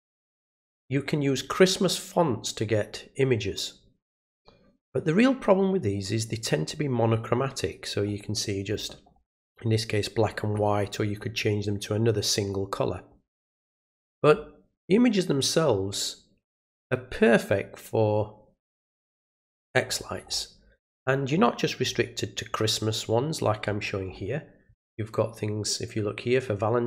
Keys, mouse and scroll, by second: 8.0 scroll down 1, 19.1 scroll up 1, 19.9 scroll up 2, 20.3 scroll down 2, 21.9 scroll down 2, 22.5-22.9 scroll down 2.